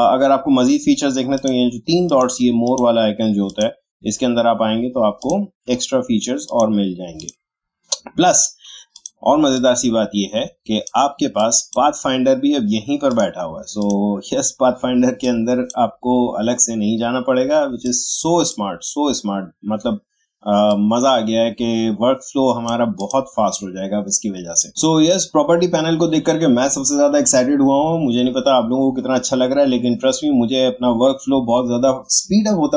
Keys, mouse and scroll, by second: 17.8-27.6 drag.